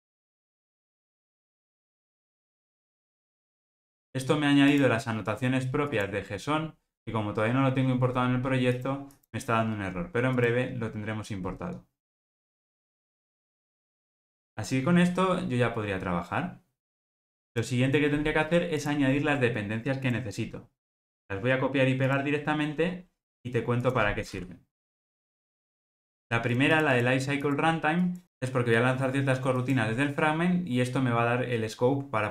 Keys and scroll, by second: 25.2 super+v.